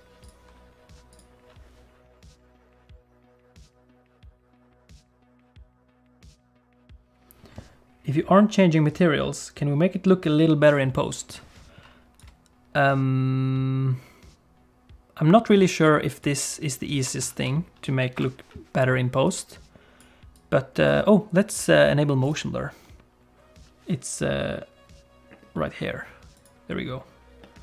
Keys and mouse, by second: 12.2-16.3 drag, 17.2 ctrl+s, 20.4 F12, 26.4 click.